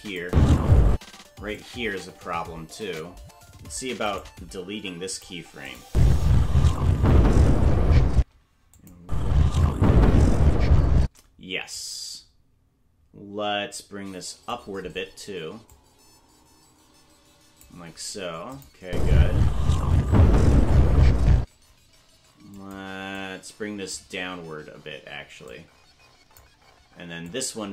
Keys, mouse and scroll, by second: 0.2 space, 1.6-3.0 drag, 4.0 right click, 4.7 Delete, 5.7 click, 5.8 space, 8.1 space, 8.7 click, 9.0 space, 11.7-14.5 drag, 15.6-17.7 drag, 18.6 click, 18.8 space, 21.4 space, 22.5 click, 23.2 click, 25.4 click, 27.3-27.7 drag.